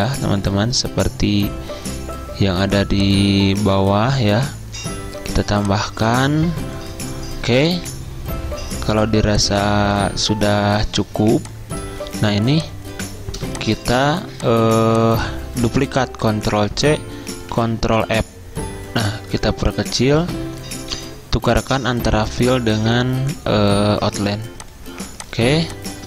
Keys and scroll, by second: 13.0 v, 16.7 ctrl+c, 17.6 ctrl+f.